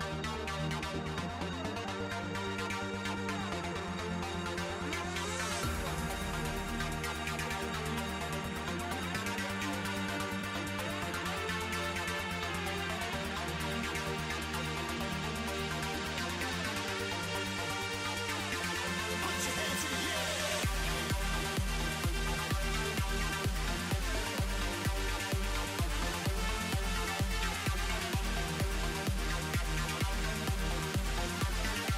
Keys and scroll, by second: 7.9 s, 12.1 s.